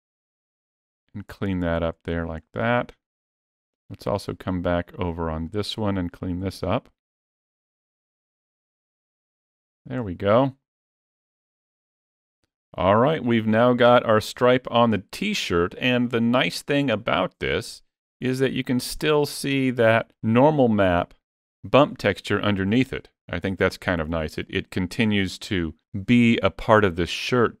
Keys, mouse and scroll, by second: 0.8 click, 2.2-3.9 scroll down 4, 2.7 middle click, 4.9-5.8 scroll up 2, 5.3 middle click, 6.6 click, 8.5 click, 9.9-10.3 scroll down 3, 10.3 middle click, 11.8-12.3 scroll down 3, 17.1-18.2 scroll down 9, 18.2-18.8 scroll up 6, 18.8 shift+middle click, 19.2-19.5 scroll up 1, 19.5 middle click, 19.8-20.2 scroll up 1, 22.2-22.8 scroll down 2, 22.8-23.4 scroll down 2, 26.8-27.6 scroll down 2.